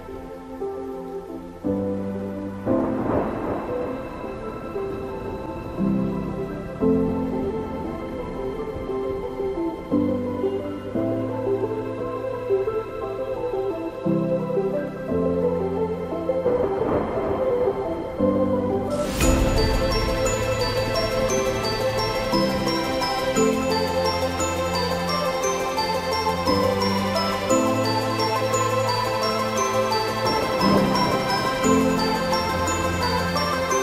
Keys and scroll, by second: 0.8 ctrl+g, 3.1 ctrl+alt+shift+e.